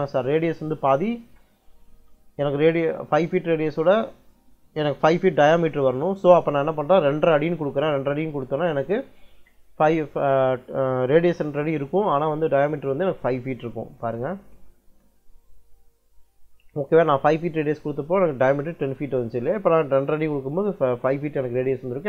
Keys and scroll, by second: 7.0 2, 7.4 ', 8.0 6, 13.9 Return.